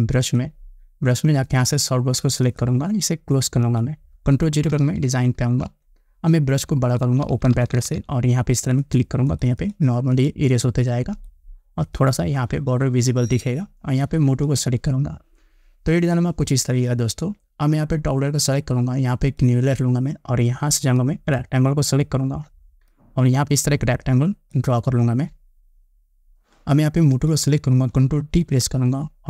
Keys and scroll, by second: 5.6 ctrl+0, 7.2 ], 28.5 ctrl+t.